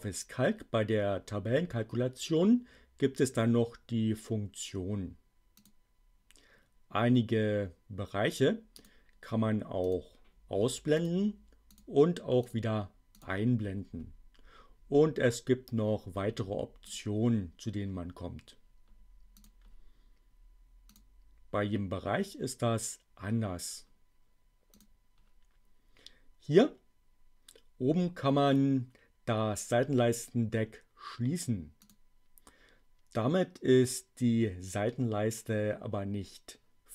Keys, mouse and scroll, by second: 5.4 click, 8.7 click, 9.7 click, 10.9 click, 11.6 click, 12.3 click, 12.9 click, 16.8 click, 19.3 click, 20.8 click, 24.7 click, 31.5 click.